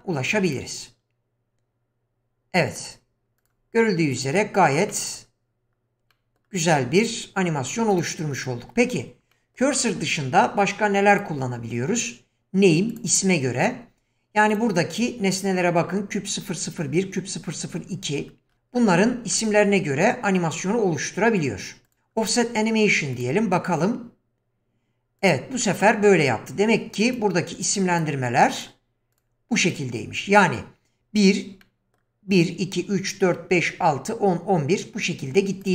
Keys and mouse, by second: 0.4 click, 2.7 click, 3.4 drag, 4.1 click, 4.9 middle drag, 6.1 middle drag, 7.0 drag, 7.9 click, 9.3 middle drag, 9.9-10.2 middle drag, 11.1-13.0 drag, 23.2 click, 25.2 click, 25.6-26.3 middle drag, 27.0 click, 27.9 click, 28.6 drag, 29.2 click, 29.6 click, 31.6-32.0 middle drag.